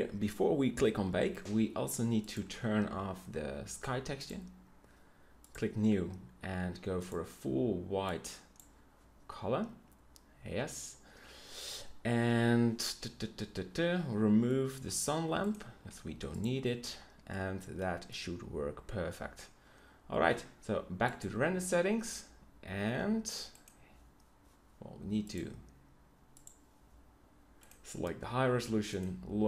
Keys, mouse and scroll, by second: 15.8 x.